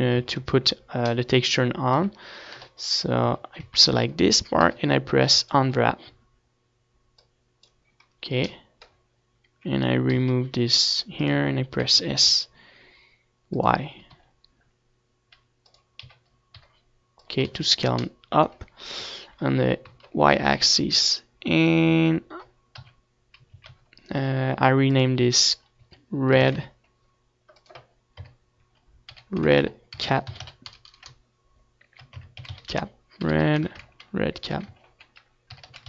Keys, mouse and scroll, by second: 0.3-2.3 drag, 1.3-2.9 middle drag, 1.3 right click, 2.0 KP_3, 2.3 right click, 3.2 KP_1, 4.0 KP_Decimal, 4.7-6.4 middle drag, 5.0 Tab, 7.4 KP_7, 8.0 a, 8.4 a, 9.0 u, 12.1-15.0 drag, 15.0 g, 16.6-18.0 drag, 16.6 s, 18.8-20.5 drag, 18.8 g, 20.9-23.9 drag, 20.9 s, 23.5 ctrl+s, 24.8 Tab, 25.8 Tab, 26.9 Tab, 27.6 KP_3, 28.4 z, 29.8 click, 30.6-35.8 right drag.